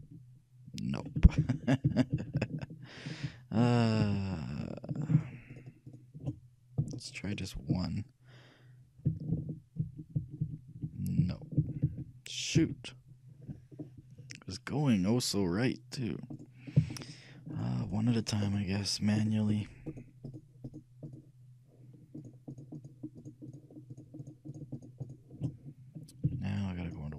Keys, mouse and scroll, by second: 0.1 ctrl+KP_Add, 1.5 ctrl+z, 2.0 ctrl+z, 2.3 ctrl+z, 2.5-3.4 ctrl+z, 4.2 ctrl+z, 5.3-9.1 right drag, 9.5 ctrl+KP_Add, 10.0 ctrl+KP_Add, 10.3 ctrl+KP_Add, 10.6 ctrl+KP_Add, 10.9 ctrl+KP_Add, 11.7 ctrl+z, 12.4 ctrl+z, 12.7 ctrl+z, 13.8-16.5 ctrl+middle drag, 16.5-27.0 right drag, 26.4 z.